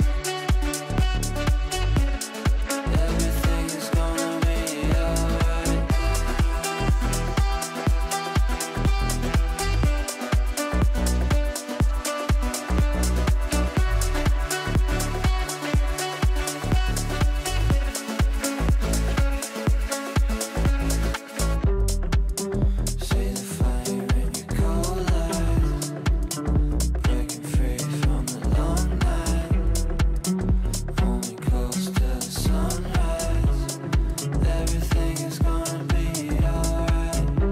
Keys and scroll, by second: 10.4 Delete, 26.9 Delete, 29.8 shift+F2, 30.2 F3, 33.4 shift+Page_Down, 35.7 shift+F2, 36.1 Escape.